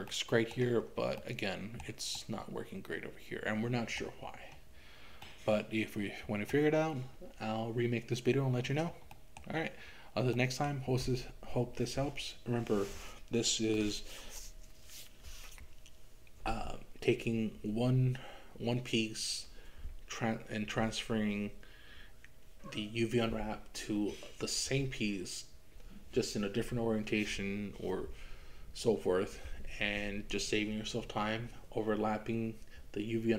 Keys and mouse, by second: 0.1 middle click, 1.2 middle click, 2.2-4.0 middle drag, 5.2-6.6 middle drag, 9.2 middle click, 10.6 middle click.